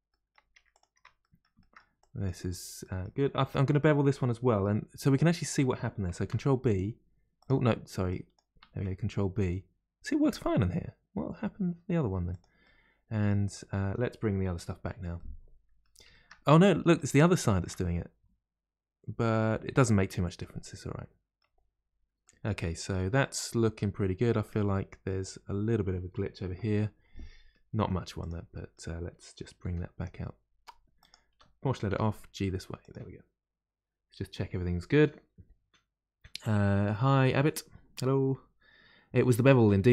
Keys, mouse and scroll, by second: 0.1 middle click, 0.5 Tab, 0.7 click, 0.9 Tab, 1.2 middle click, 2.0 click, 2.8-6.1 middle drag, 6.1 ctrl+b, 8.1 click, 8.7 ctrl+b, 12.6-14.5 middle drag, 14.5 KP_Divide, 15.1-21.7 middle drag, 21.7-22.2 scroll down 2, 22.2-23.9 middle drag, 23.9-24.4 scroll up 3, 24.4-26.4 middle drag, 26.4 KP_Divide, 27.2 middle click, 27.8 1, 28.2 click, 28.5-29.6 middle drag, 29.6 g, 29.7 g.